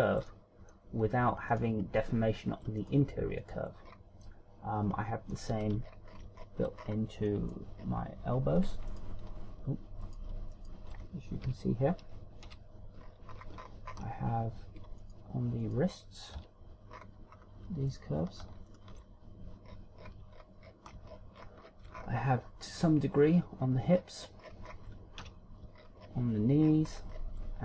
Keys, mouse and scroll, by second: 0.1 shift+right click, 0.5 shift+right click, 0.9 middle click, 2.6 shift+right click, 3.4 right click, 4.1 shift+right click, 4.5-4.9 scroll down 3, 4.8 middle click, 6.5-7.3 ctrl+scroll down 8, 7.4-7.8 scroll up 5, 7.9 middle click, 8.4-8.9 scroll down 3, 9.5 alt+right click, 9.5 scroll down 6, 10.7 alt+right click, 11.2 alt+shift+right click, 12.0 KP_Decimal, 13.0 KP_7, 13.6-14.0 scroll down 8, 14.0 scroll up 1, 14.1 scroll down 1, 14.4-14.8 ctrl+scroll up 6, 15.8 alt+right click, 16.4 alt+right click, 17.2 KP_1, 17.7 scroll up 3, 18.4 scroll up 1, 18.6 alt+right click, 19.4 alt+shift+right click, 20.4-21.5 scroll down 15, 22.0-22.3 shift+scroll down 3, 22.7 scroll up 1, 23.2 scroll up 3, 24.7-26.0 shift+scroll down 19, 25.9 KP_3, 26.5-26.9 shift+scroll down 6, 27.4-27.6 shift+scroll down 5.